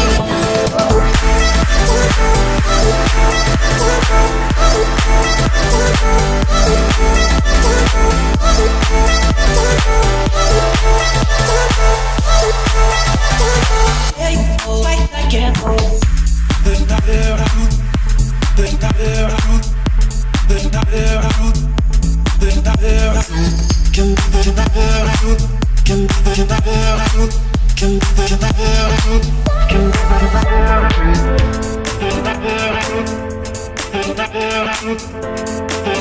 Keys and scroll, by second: 8.2 3, 9.5 3, 20.6 Escape.